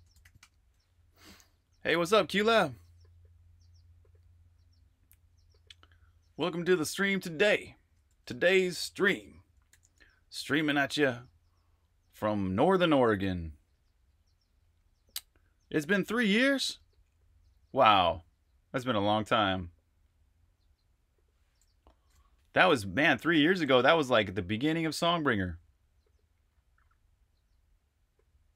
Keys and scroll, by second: 0.0-0.3 typing, 8.0 ↻, 9.7 j.